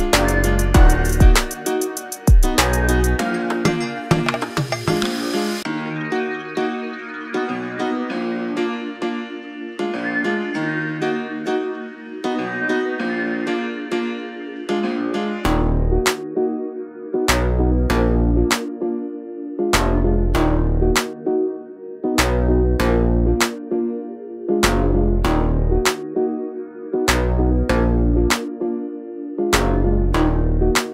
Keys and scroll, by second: 2.3 space, 3.3 r, 5.3 space, 6.2 Delete, 7.1-8.9 typing, 16.5 r, 18.1 space, 18.6 p, 19.8 space, 21.8 r, 23.3 space, 24.2 p, 25.2 space, 27.2 r, 30.1 space.